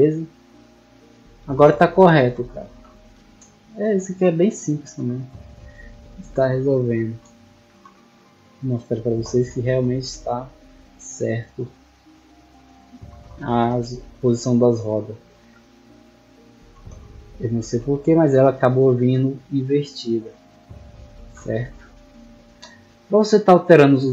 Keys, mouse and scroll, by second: 0.2 click, 1.7-2.8 typing, 3.8 right click, 5.5 click, 6.1-6.6 drag, 7.0 shift+right click, 8.4 click, 9.2-10.2 typing, 11.1 right click, 11.7-12.4 drag, 13.8 click, 14.5 shift+right click, 15.9 click, 17.0-18.0 typing, 18.4 right click, 20.8 click, 21.3 click, 22.0-22.4 middle drag, 23.0-23.3 middle drag.